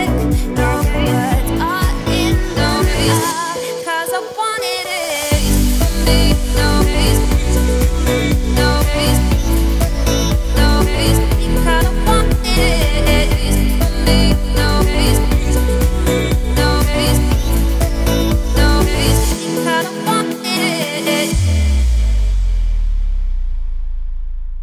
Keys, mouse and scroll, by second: 0.4 click, 4.6 click, 5.5 click, 6.9 click, 10.2 click, 11.7 click, 14.6 shift+click, 15.3 scroll down 1, 16.0 ctrl+click, 16.5 ctrl+click, 17.6 shift+click, 18.2 x, 18.7-19.0 scroll up 1, 19.7 ctrl+z, 20.3 ctrl+click, 21.0 x, 21.6-22.2 shift+middle drag, 22.2 click, 23.4-24.6 drag.